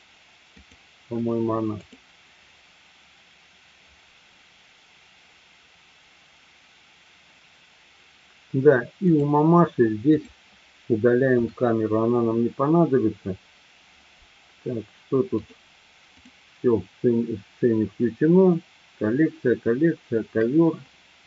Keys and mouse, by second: 9.2 click, 10.0 click, 11.4 Delete, 16.0 click.